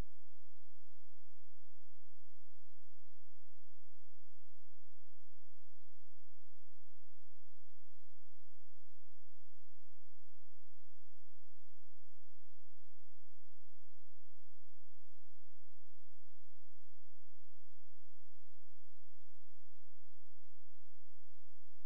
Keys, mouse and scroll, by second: 1.9 space, 2.7 click, 3.8 shift+click, 4.3 c, 4.7 Escape, 6.6 click, 10.9-15.8 typing, 16.6 click, 20.8 shift+right click.